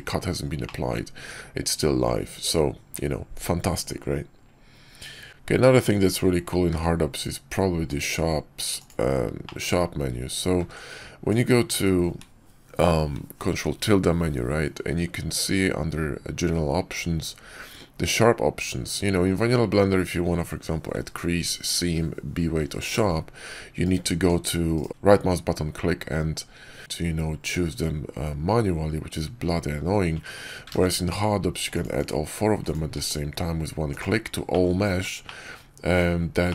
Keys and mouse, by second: 0.5 middle click, 1.0 Tab, 5.3 shift+a, 6.6 q, 9.3 click, 10.5 ctrl+`, 24.1 Tab, 24.6-26.7 right drag, 26.8-28.5 right drag, 29.2 Tab, 30.6 ctrl+`, 32.8 q, 34.4 click, 35.1 drag, 35.8 Tab, 36.4 click.